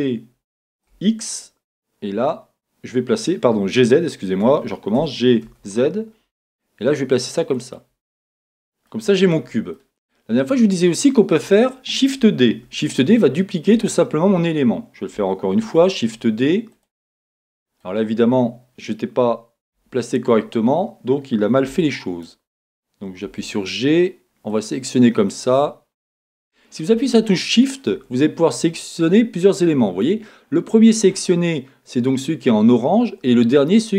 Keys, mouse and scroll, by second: 4.6 Escape, 5.0 g, 7.7 click, 8.2-9.3 middle drag, 9.3-9.7 scroll down 2, 9.7-12.6 middle drag, 12.6 shift+d, 13.9 click, 15.5 shift+d, 16.8 click, 17.3 middle click, 19.7 KP_1, 21.7 g, 22.2 click, 23.2 g, 25.3 click, 27.5 shift+click.